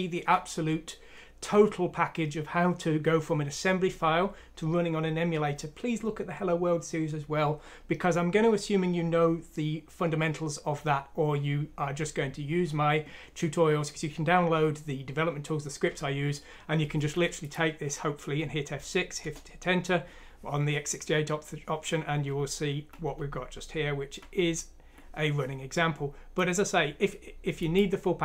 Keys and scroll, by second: 18.1 F6, 19.2 Return, 22.4 End, 22.8 End, 23.1 End, 23.6 End, 23.7 End.